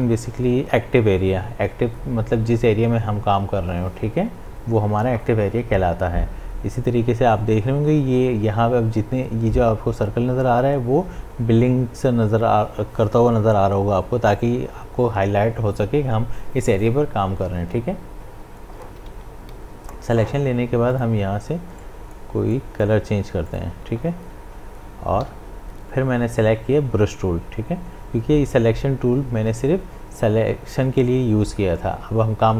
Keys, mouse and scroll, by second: 20.9-22.5 drag, 25.2 b.